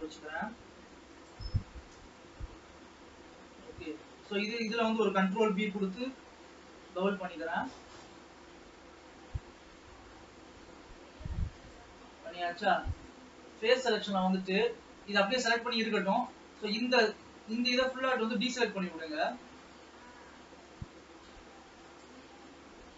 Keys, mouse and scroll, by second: 2.0 KP_0, 3.6 scroll up 1, 4.1-5.6 shift+middle drag, 5.6 ctrl+b, 13.4 click, 14.3-16.4 middle drag, 16.4 shift+click, 17.7-18.8 ctrl+drag, 18.8-21.4 middle drag, 21.4 ctrl+click, 22.2 ctrl+click, 22.7-22.9 middle drag.